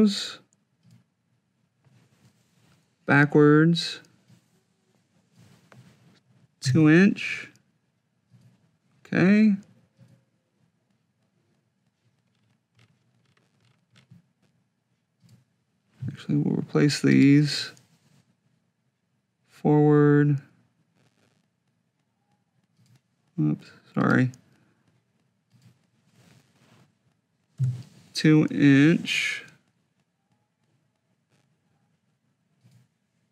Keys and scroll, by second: 6.4 2, 27.9 2.